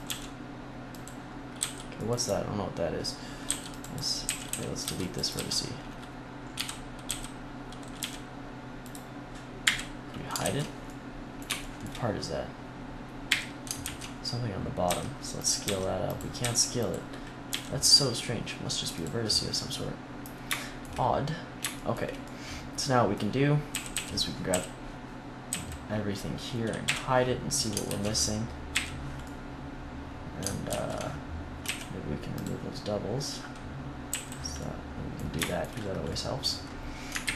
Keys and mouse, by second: 1.5 c, 3.3-5.2 typing, 5.2 click, 6.4 x, 6.7 click, 6.9 x, 7.9 g, 9.5 click, 9.5 h, 10.3 ctrl+z, 10.5 middle click, 13.2 h, 13.7 ctrl+z, 14.7 s, 15.5 s, 16.0-18.8 drag, 16.3 s, 17.4 g, 18.9-23.6 drag, 23.6 a, 23.8 a, 24.4 a, 25.4 a, 26.7 h, 27.8 ctrl+z, 28.6 h, 30.6 ctrl+z, 31.5 w, 34.0 a, 37.1 ctrl+KP_1.